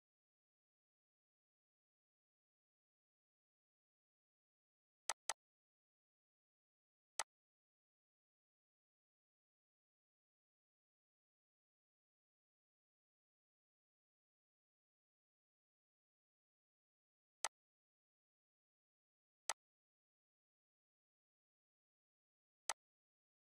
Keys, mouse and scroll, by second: 5.1 click, 9.6 ctrl+d, 17.4 click, 22.7-23.4 drag.